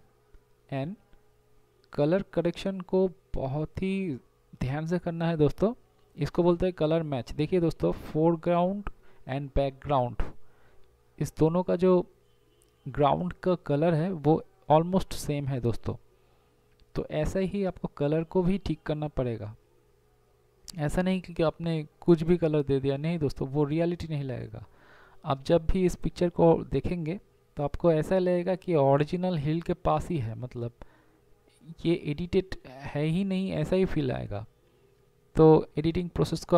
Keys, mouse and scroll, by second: 1.7 ctrl+z, 7.8 ctrl+z, 8.5 ctrl+z, 10.6 ctrl+z, 13.8 ctrl+z, 17.6 ctrl+z, 18.5 ctrl+z, 22.6 ctrl+i, 23.0 b, 25.1 x.